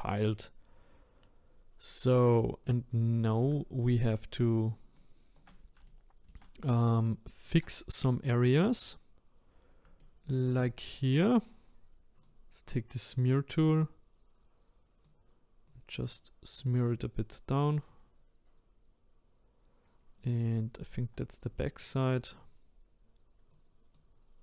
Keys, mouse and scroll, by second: 2.6 click, 3.8 shift+right click, 5.9 shift+middle click, 6.4-7.0 scroll up 5, 7.0-8.2 shift+middle drag, 8.2-9.5 scroll down 1, 9.5-10.0 scroll up 1, 10.0 shift+middle click, 10.8-12.2 scroll up 2, 12.2-19.9 drag, 20.0 scroll down 1, 20.5-22.5 shift+middle drag, 22.5-23.2 scroll up 2, 23.2 scroll up 1, 23.5-24.4 drag.